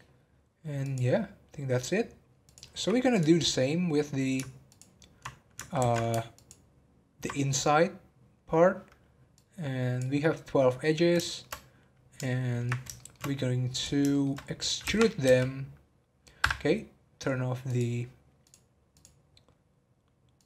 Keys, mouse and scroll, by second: 0.8-3.2 drag, 3.5-4.7 middle drag, 4.7 ctrl+click, 5.7 ctrl+z, 6.3 ctrl+click, 10.5-11.2 scroll down 2, 11.2-13.7 middle drag, 13.7 click, 14.1 shift+middle click, 14.4-15.2 scroll up 4, 17.6 click, 18.4-20.4 drag.